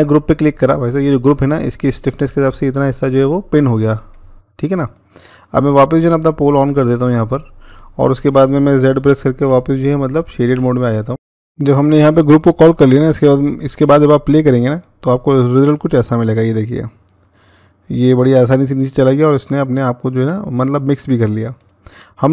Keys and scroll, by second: 9.3-10.3 z.